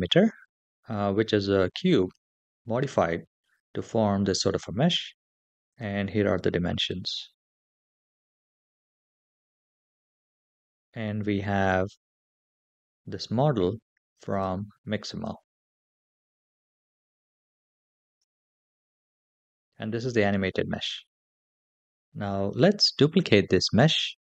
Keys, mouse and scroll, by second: 5.5 click, 8.3 click, 9.6 /, 12.3 click, 14.1 click, 14.9 click, 16.9 click, 18.0 /, 23.4 shift+d.